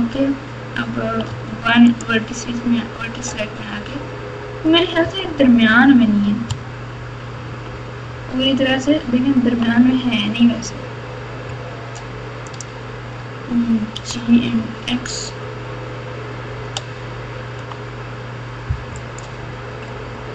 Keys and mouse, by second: 1.3 1, 1.8 click, 5.0 KP_4, 5.2 KP_4, 6.4-7.5 ctrl+KP_4, 8.7-9.6 ctrl+KP_8, 12.4 click, 13.9 g.